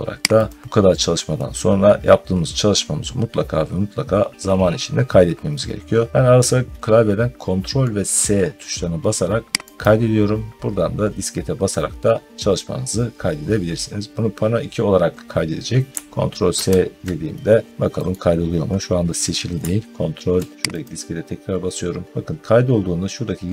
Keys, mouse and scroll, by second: 0.3 click, 9.7 click, 15.9 click, 16.4 ctrl+s, 17.9 middle click, 20.6 click.